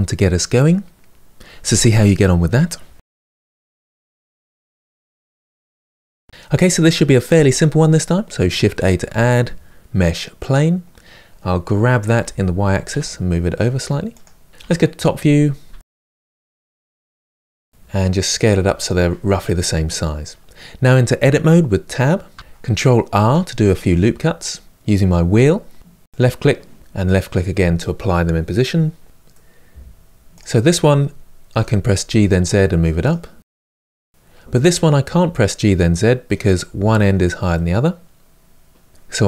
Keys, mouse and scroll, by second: 6.3 n, 10.2 shift+a, 12.0 g, 14.5 KP_7, 15.5-16.5 shift+middle drag, 16.5-17.1 scroll down 6, 17.1 g, 17.6 s, 19.8-22.1 scroll up 4, 22.1 Tab, 22.9 ctrl+r, 29.0-30.3 middle drag, 30.3 click, 31.3 g, 33.5 click, 33.7-38.9 middle drag, 38.9 1.